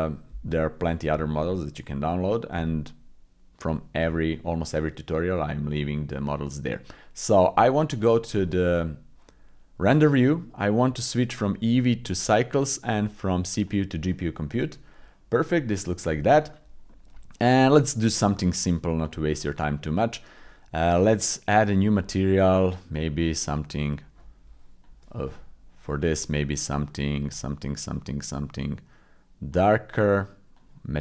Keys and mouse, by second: 0.9 shift+middle click, 1.3 middle click, 2.1 middle click, 5.6 middle click, 8.1 click, 11.4 click, 13.0 click, 14.5 click, 15.3 middle click, 16.9 middle click, 19.0 click, 21.9 click, 30.6 click.